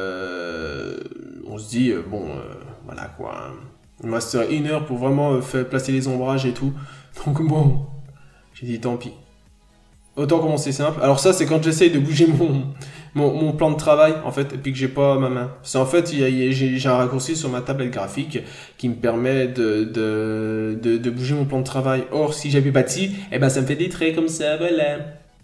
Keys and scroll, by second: 0.5 n, 1.6 n, 4.0 n, 6.0 b, 6.5-6.8 scroll down 1, 6.8 b, 8.8 ctrl+z, 9.6 ctrl+z, 10.1 b, 10.5 ctrl+z, 10.7 b, 11.0 ctrl+z, 11.1 n, 16.2 b, 18.4 n.